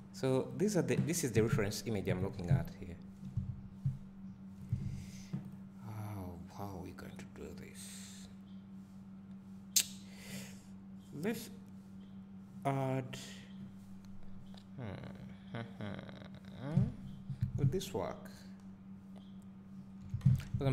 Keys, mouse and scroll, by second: 0.5-5.5 drag, 16.7 Tab, 16.7-20.7 drag, 17.6 `, 20.2 Tab.